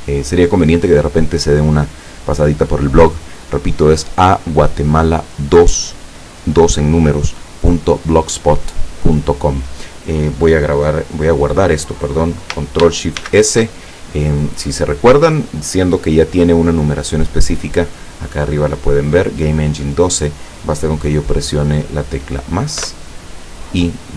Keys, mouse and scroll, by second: 13.2 ctrl+shift+s, 22.8 KP_Add.